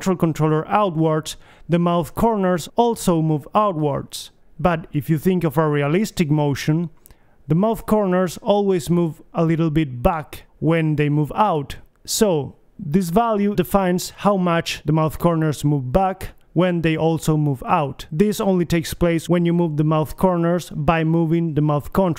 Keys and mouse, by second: 9.3 BackSpace, 9.8 BackSpace, 13.4-16.8 middle drag, 16.8 click, 17.9 middle click, 20.6 middle click.